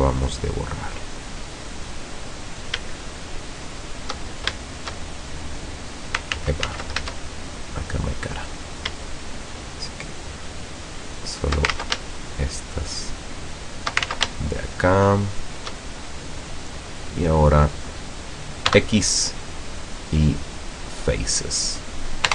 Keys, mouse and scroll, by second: 0.4 shift+middle click, 1.3 middle click, 1.8 middle click, 2.4 middle click, 3.8 shift+right click, 4.8 shift+right click, 5.4 shift+middle click, 6.4 ctrl+z, 7.1 ctrl+shift+z, 7.4-8.5 shift+middle drag, 8.6-9.0 scroll up 1, 9.5 shift+right click, 10.3 shift+right click, 11.0 shift+right click, 11.8 ctrl+shift+z, 12.2 ctrl+shift+right click, 12.9 shift+right click, 13.6 shift+right click, 14.2 ctrl+shift+z, 14.6 ctrl+shift+right click, 15.3 shift+right click, 16.0 shift+scroll down 2, 16.3-18.0 middle drag, 18.8 x, 19.5 click, 20.6 scroll down 2, 21.0-22.0 middle drag.